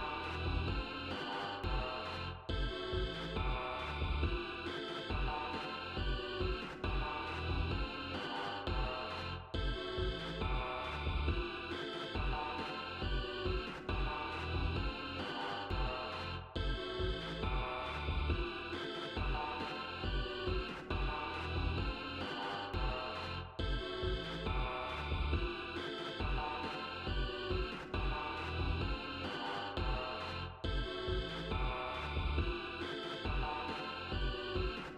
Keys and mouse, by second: 6.3-7.9 drag, 9.4 right click, 13.1 click, 21.0-23.3 drag, 24.5 right click, 27.5 click.